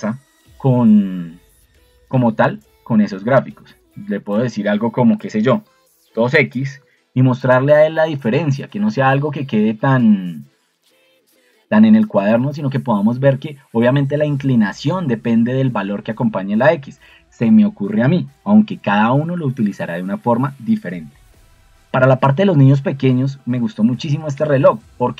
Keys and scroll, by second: 5.2-6.9 typing.